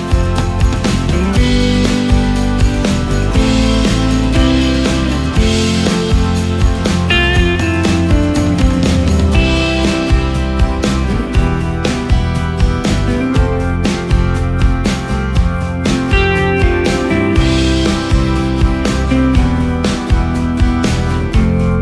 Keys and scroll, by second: 17.2 ctrl+shift+space.